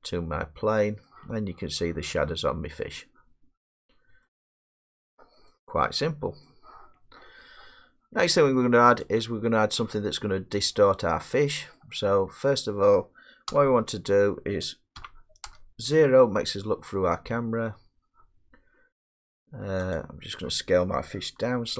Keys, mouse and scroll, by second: 0.8 scroll, 2.7-3.0 scroll, 3.2 middle click, 4.2 middle click, 5.3 middle click, 5.6 middle click, 6.5 middle click, 9.2 click, 10.9 middle click, 10.9 middle click, 11.8 middle click, 12.4 middle click, 12.4 middle click, 12.5 middle click, 13.5 1, 14.3 scroll, 15.0-15.5 typing, 17.6 middle click, 17.7 middle click, 20.0 click, 21.6 s.